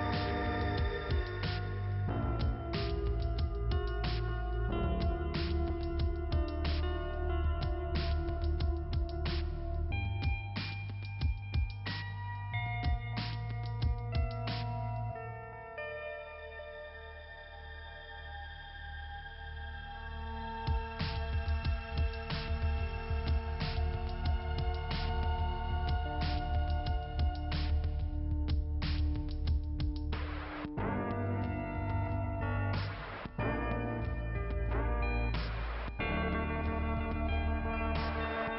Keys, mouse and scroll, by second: 1.7 click, 2.9-3.8 scroll up 1, 3.8 click, 4.6 click, 4.9 click, 5.8 click, 6.7 click, 7.9 click, 9.0 click, 11.0 click, 11.9 click, 12.2 click, 12.3 double click, 13.1 double click, 15.2 click, 16.2 click, 17.6 click, 17.8 click, 20.2 click, 21.3 click, 21.4 click, 21.9-24.4 typing, 26.0-27.6 typing, 28.6 h, 28.8 h, 31.3 click, 31.6 click, 31.9 click, 33.6 click, 36.6 click, 37.5 click, 38.0 click.